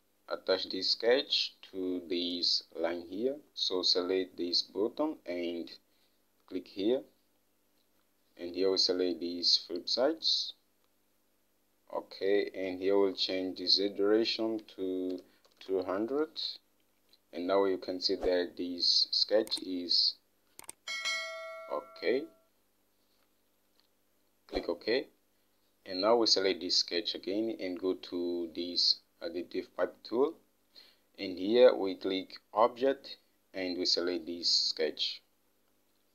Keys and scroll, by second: 15.3-16.5 typing, 18.9-19.7 typing.